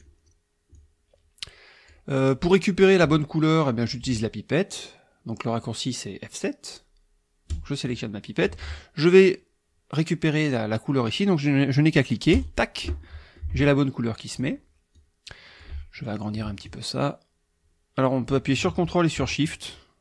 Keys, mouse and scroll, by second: 0.7-2.1 drag, 7.5 click, 12.3 click, 13.0 click, 14.3 click, 14.9-15.8 drag, 16.6-20.0 ctrl+drag.